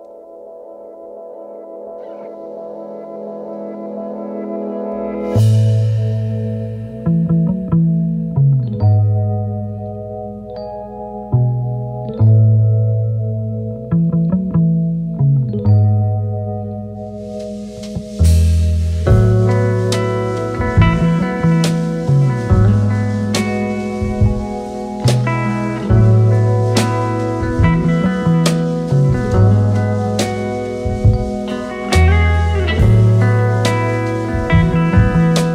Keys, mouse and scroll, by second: 0.6 space, 5.0-5.6 space, 5.9 alt+scroll up 2, 6.7 space, 9.1 t, 12.3-13.2 typing, 16.5-17.3 typing, 19.0 alt+scroll up 2, 19.3 space, 21.2 right click, 24.7 alt+scroll down 2, 27.1-27.9 typing, 29.5 ctrl+], 30.1 alt+scroll up 2, 30.4 space.